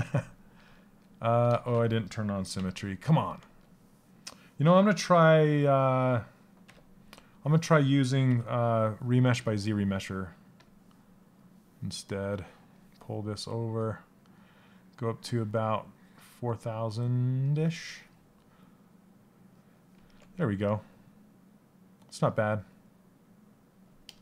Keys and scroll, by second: 1.1 ctrl+z, 6.2 2.